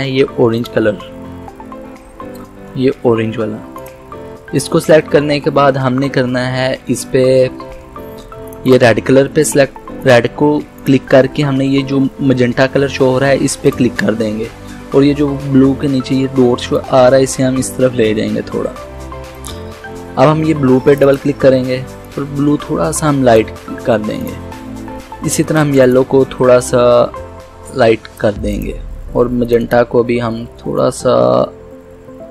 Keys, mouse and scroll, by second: 3.8 click, 8.5 click, 13.7 click, 16.8-32.3 drag.